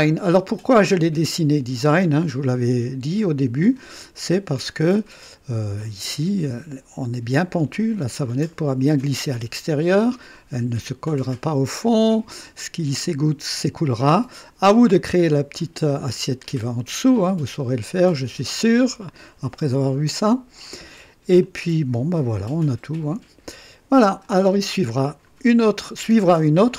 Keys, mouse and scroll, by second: 4.8-6.3 drag, 9.3-10.2 drag, 11.6 click, 14.0 click, 16.4-18.6 drag, 18.8-19.6 drag, 21.4-24.4 drag, 24.9 scroll up 1, 25.9-26.7 drag.